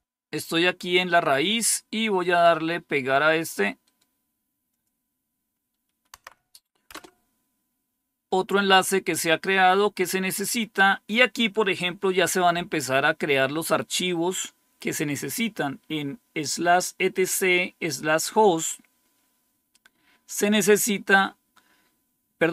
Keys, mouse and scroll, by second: 3.7 right click, 4.6 click, 6.0 Tab, 6.8 Return.